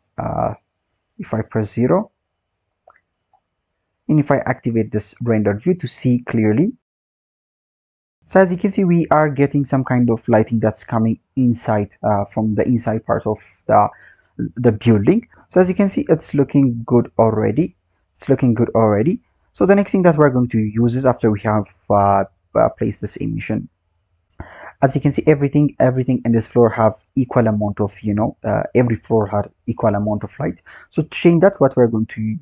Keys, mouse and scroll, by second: 0.5-2.5 scroll down 7, 2.5-3.0 scroll down 4, 3.0-5.0 scroll up 4, 5.0 click, 7.0 click.